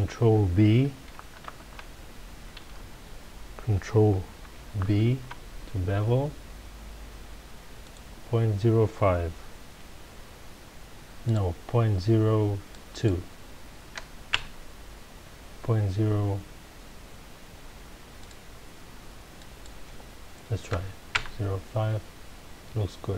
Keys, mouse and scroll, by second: 1.4 ctrl+v, 2.7 Escape, 4.8 ctrl+b, 7.9 click, 11.2-14.3 drag, 14.4 KP_Enter, 18.2-21.2 drag, 21.2 KP_Enter.